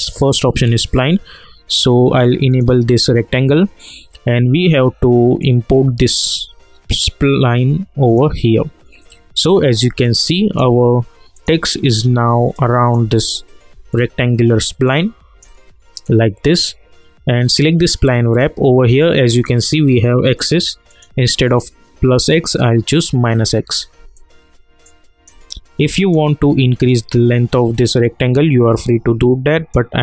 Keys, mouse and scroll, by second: 2.5 click, 5.4-10.0 drag, 10.0-11.3 alt+drag, 12.5-13.9 alt+drag, 13.9 alt+middle click, 14.8-17.5 alt+drag, 24.1-30.0 alt+drag.